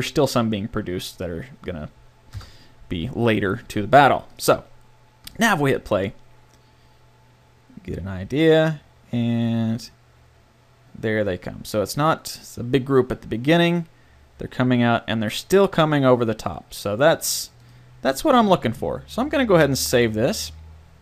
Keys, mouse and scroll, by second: 2.4 KP_0, 2.9 a, 17.2-19.2 drag.